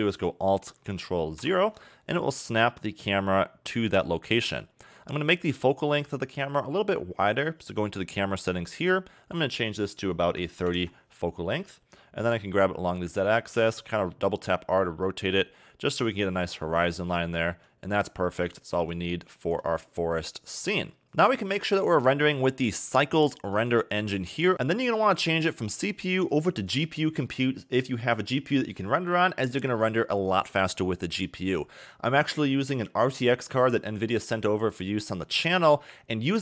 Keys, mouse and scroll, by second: 1.4 ctrl+alt+KP_0, 5.4 click, 8.6-9.5 scroll up 2, 9.5 click, 12.2 g, 13.5 r, 17.5 g, 18.8 g, 19.6 g, 22.8 click, 24.5 click, 25.6 click.